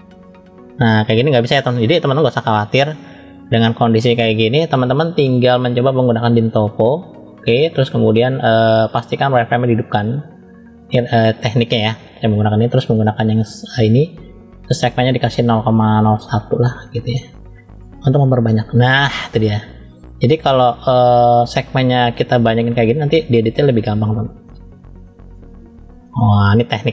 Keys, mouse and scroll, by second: 6.1-7.4 drag, 8.4-10.8 drag, 14.6-17.1 drag, 17.7 click, 18.8 middle click, 20.1 click, 20.9 middle click, 22.3 click, 23.9 middle click, 24.8 click, 25.9-26.9 middle drag.